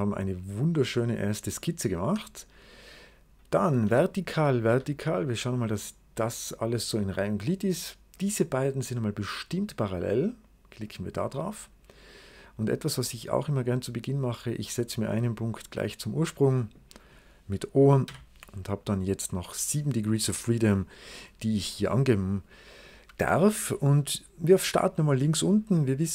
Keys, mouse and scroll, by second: 0.4 middle click, 0.4 right click, 0.7 click, 2.3 click, 3.7 v, 4.3 click, 4.6 v, 4.9 click, 6.1 right click, 7.3 click, 8.0 click, 10.7 click, 11.9 click, 13.2 click, 13.4 right click, 14.3 click, 14.7-15.2 scroll up 1, 15.5 click, 16.5 click, 17.9 o, 19.0 scroll down 2, 21.7 right click.